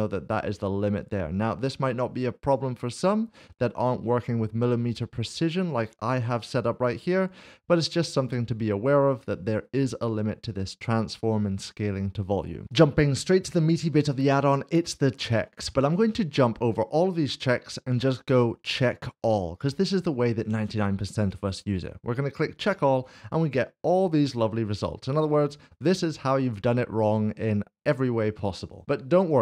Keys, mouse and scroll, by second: 2.4 click, 5.6 click, 8.1 click, 12.8 click, 18.7 click.